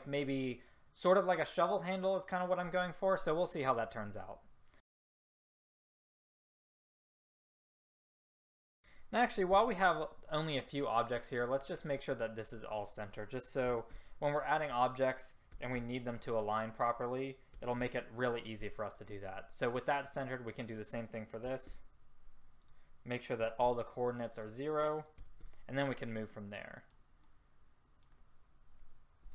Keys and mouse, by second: 5.4 r, 6.2 s, 6.3 click, 9.6 a, 19.0-20.7 drag, 25.9-29.3 middle drag.